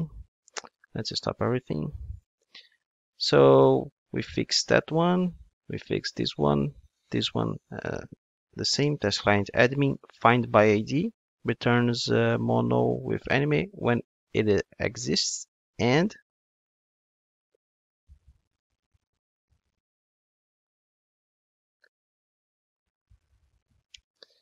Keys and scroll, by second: 0.5 super+F2, 8.8 Return, 19.0 super+c, 20.8 super+v.